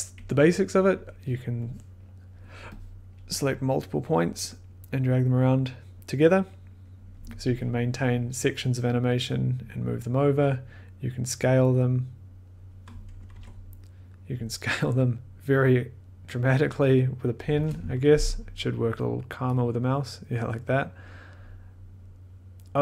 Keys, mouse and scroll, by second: 0.0-2.1 drag, 3.1 click, 7.1 click, 8.4 click, 13.3 ctrl+z, 17.4 click, 17.5 ctrl+z.